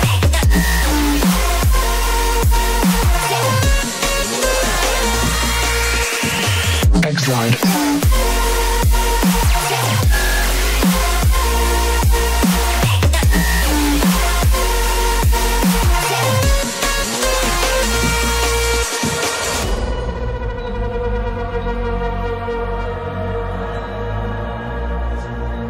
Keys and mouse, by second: 13.1 click, 13.9-15.7 middle drag, 17.6 ctrl+r, 21.3 click, 22.4 ctrl+r.